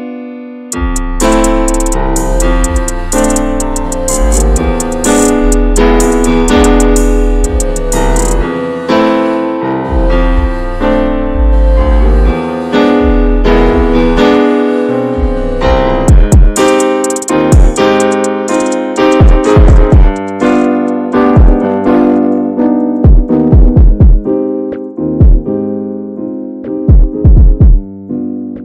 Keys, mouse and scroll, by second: 0.0-1.1 drag, 2.2 middle click, 2.4-3.1 scroll up 3, 2.7 shift+middle click, 3.4-4.0 alt+middle drag, 4.0 click, 4.7 click, 5.7 alt+middle click, 6.3 s, 8.0-9.8 drag, 10.4 scroll down 1, 10.6 shift+middle drag, 10.9 click, 11.1 Tab, 11.3 click, 11.8 l, 12.1-12.4 scroll down 2, 12.4 shift+middle click, 13.0 shift+d, 13.8 click, 17.2 Tab, 17.6 click, 17.9 scroll up 2, 18.3 click, 19.5 scroll down 2, 19.7 middle drag, 19.9 scroll up 1, 20.0 ctrl+s, 20.4 scroll up 1, 20.8 click, 22.8 scroll down 1, 23.0 ctrl+a, 23.6-24.3 middle drag, 24.3 shift+click, 24.6 shift+click, 25.0 drag, 25.3 shift+drag, 25.8 ctrl+j, 26.3-26.7 middle drag, 26.9 right click, 27.6 click, 27.8 click, 28.0 scroll down 2, 28.2-28.5 middle drag, 28.5 scroll up 1.